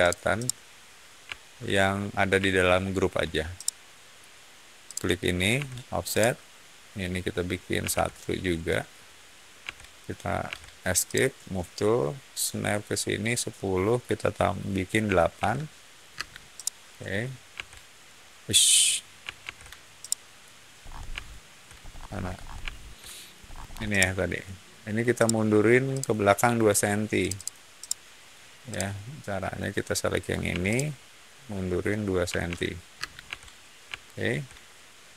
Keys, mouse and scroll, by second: 0.3-3.0 middle drag, 3.5 shift+middle click, 4.8 shift+click, 5.5 f, 6.0 click, 7.7 1, 7.8 Return, 9.5 p, 10.4 Escape, 11.0 click, 15.0 8, 15.3 Return, 16.0 space, 16.5 middle click, 17.4 Escape, 19.3 shift+z, 19.9-20.3 middle drag, 20.7-21.2 scroll up 2, 21.2 shift+middle click, 21.7 scroll up 1, 22.6-23.2 shift+middle drag, 23.3-23.7 scroll up 2, 23.8-24.3 shift+middle drag, 25.1-25.5 shift+middle drag, 25.8 shift+click, 27.1 shift+click, 27.3 shift+click, 27.7-28.2 shift+middle drag, 28.6 shift+click, 30.4 m, 30.6 click, 32.2 2, 32.4 Return, 32.9 space, 33.2 Escape, 34.0-35.0 shift+middle drag.